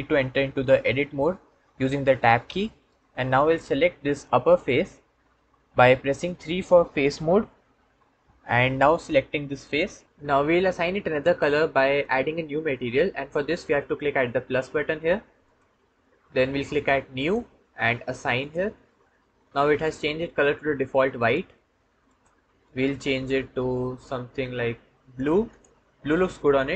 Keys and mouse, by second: 2.3 Tab, 7.6 3, 9.5 click, 15.3 click, 17.0 click, 18.2 click, 21.9 click, 25.4-26.6 drag.